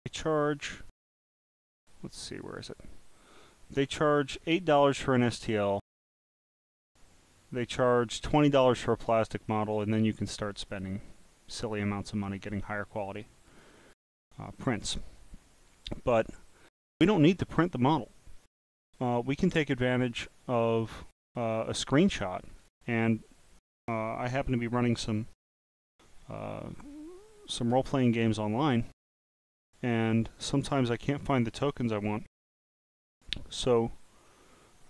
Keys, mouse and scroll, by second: 2.4 click, 6.3 click, 9.7 click, 10.7 click, 11.6 click, 13.5 click, 14.5 click, 15.6 click, 21.7 click.